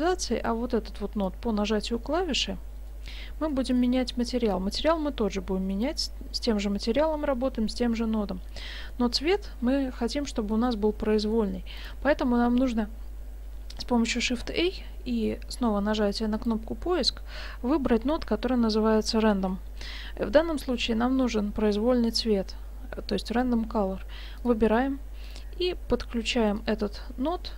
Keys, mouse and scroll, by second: 0.5 click, 2.9 middle click, 3.5 middle click, 4.6 click, 8.9 middle click, 9.7 scroll up 1, 10.1 middle click, 11.1 middle click, 11.8 click, 14.3 shift+a, 26.6 click.